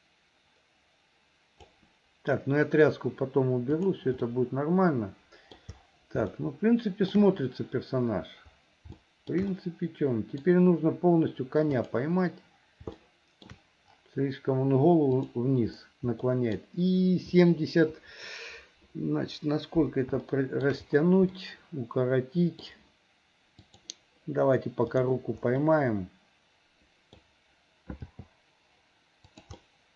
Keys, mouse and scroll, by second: 3.8 click, 4.3-5.6 middle drag, 6.4 shift+middle click, 9.0 shift+middle click, 9.5 middle click, 11.8 click, 13.1 shift+middle click, 15.3 click, 16.3 middle click, 20.3 shift+middle click, 21.3-22.6 middle drag, 23.7 click, 25.0 click, 25.6-27.1 middle drag, 28.0 g, 29.6-29.9 middle drag.